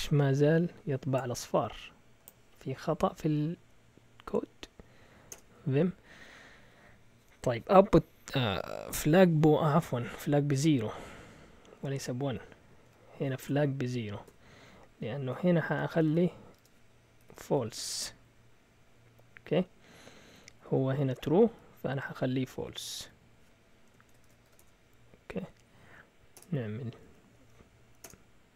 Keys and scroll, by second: 3.1 Up, 3.1 Up, 3.5 Up, 5.3 Return, 5.8-6.7 typing, 8.8-9.4 typing, 10.5-11.5 typing, 13.4-18.2 typing, 20.5-21.5 typing, 21.8 Down, 22.0 Down, 22.2 Down, 22.4 Down, 22.5 Down, 22.6 Down, 23.8 Escape, 24.0-24.9 typing, 25.3 Up, 25.5 Up, 25.8 Up, 26.1-28.0 typing.